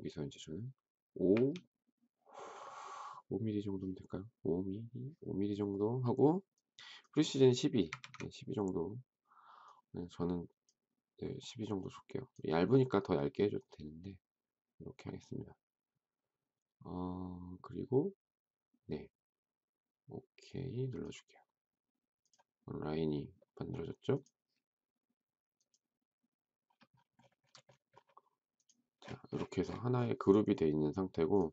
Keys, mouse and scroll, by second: 1.3 typing, 7.6-8.4 typing.